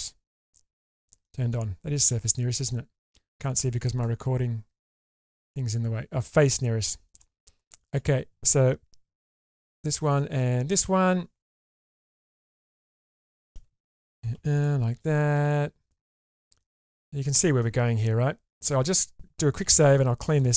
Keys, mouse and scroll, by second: 0.7 middle click, 5.2 click, 6.8 shift+middle click, 7.2 middle click, 7.8 click, 9.2 4, 10.4 4, 11.8 click, 12.4 alt+z, 13.0 shift+click, 14.1 m, 14.6 click, 15.4 alt+z, 15.8 scroll down 1, 16.0 middle click, 16.8 scroll down 1, 17.0 middle click, 17.8-19.1 scroll up 1, 19.6 ctrl+s.